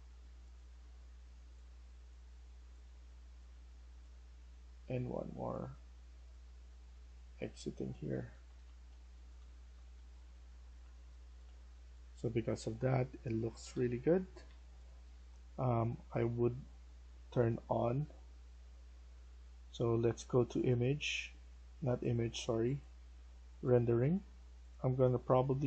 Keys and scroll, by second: 8.5 Escape, 8.6-15.6 typing, 25.2-25.6 typing.